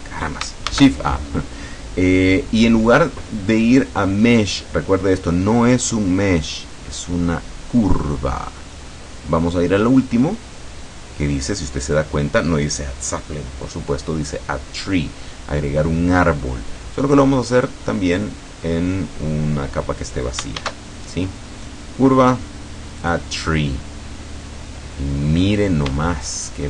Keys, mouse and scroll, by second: 0.0 click, 0.8 shift+a, 17.6 click, 18.2 click, 20.6 shift+a, 23.1 click, 24.4-26.0 scroll down 4, 26.0 shift+scroll down 1, 26.1 shift+middle click.